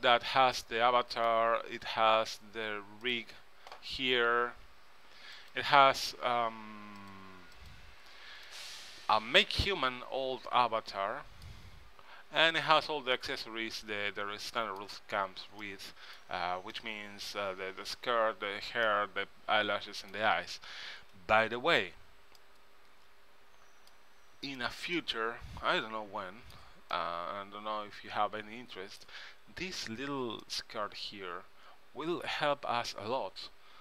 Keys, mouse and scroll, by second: 3.2-5.0 drag, 5.5-8.6 drag, 8.6-10.4 middle drag, 12.7-14.3 drag, 14.3 middle click, 15.3-18.5 middle drag, 19.0-20.9 middle drag, 22.5-24.2 middle drag, 24.7-26.7 middle drag, 27.1-28.9 middle drag, 30.6-32.3 middle drag.